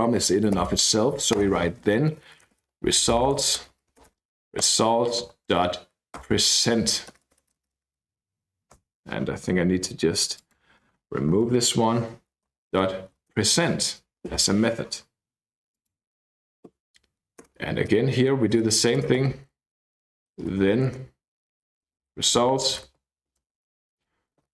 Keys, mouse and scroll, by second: 0.6 Down, 1.4 Return, 1.9-7.8 typing, 10.4 click, 11.4 Left, 11.8 Down, 12.5-14.8 typing, 13.3 Return, 15.1-15.8 scroll down 2, 15.8 click, 16.7 ., 17.4 Return, 18.1-24.5 typing, 24.0 Return.